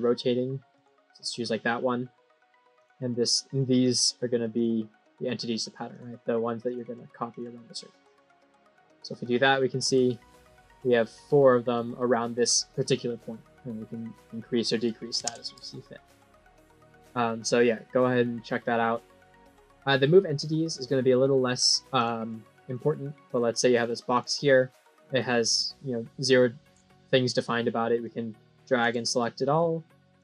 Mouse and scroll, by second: 0.6 click, 2.7 click, 3.1 right click, 3.7 click, 4.4 click, 5.8 click, 6.5 click, 7.2 click, 7.9 click, 8.6 scroll down 3, 9.4 middle click, 13.8 click, 14.0 click, 16.4 click, 18.3 middle click, 21.9 click, 22.6 click, 23.2 click, 23.6 right click, 24.0 click, 27.9 click, 30.1 click.